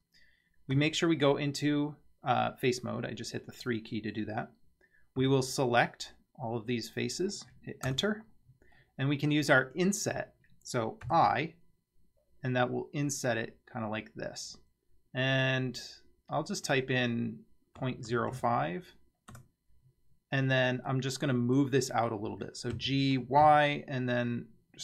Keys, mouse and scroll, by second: 0.8 3, 5.2 c, 8.8-9.6 middle drag, 11.1 i, 20.9-21.6 middle drag, 22.8 g.